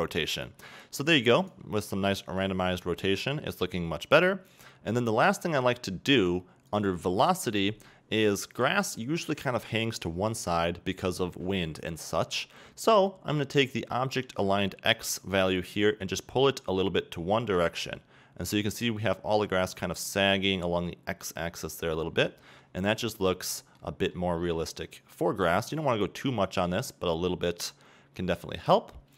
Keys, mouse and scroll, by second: 2.3 scroll down 2, 2.4-5.2 middle drag, 3.0-5.2 scroll up 2, 9.0 middle click, 9.0-9.6 scroll up 1, 11.6-12.2 middle drag, 11.6-12.2 scroll up 1, 14.2-16.2 middle drag, 16.2-20.9 drag, 22.1-23.9 middle drag, 23.9 scroll up 2, 24.2-25.9 middle drag, 25.9-27.7 drag, 27.9-28.4 scroll down 2, 28.4-29.1 middle drag.